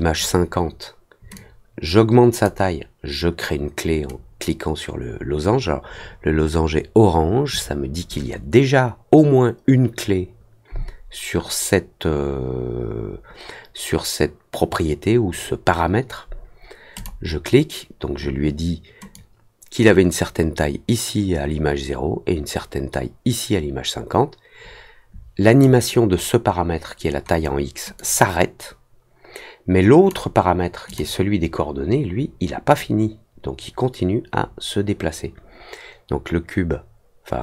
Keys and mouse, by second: 1.3-2.4 drag, 16.9 click, 19.1-25.6 drag, 27.9-30.0 drag, 30.8 click, 32.7-37.4 drag.